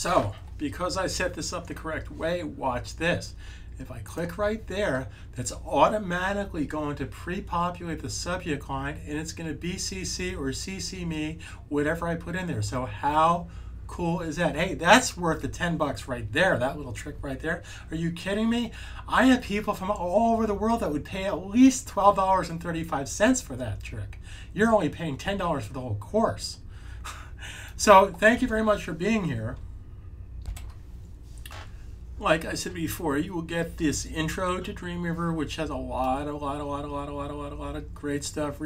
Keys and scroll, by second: 30.4 `.